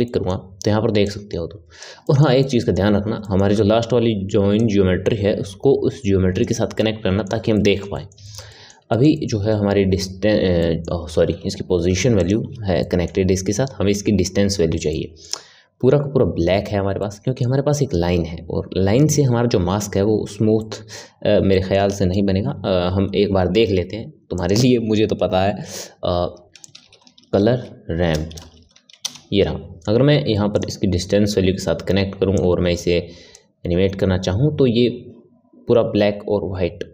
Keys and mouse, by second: 0.0-1.0 middle drag, 1.0 click, 2.0-4.6 middle drag, 4.6 click, 6.7-12.2 middle drag, 12.2 ctrl+shift+click, 12.8-20.0 middle drag, 20.6-23.7 middle drag, 23.7 shift+a, 32.3-36.9 drag.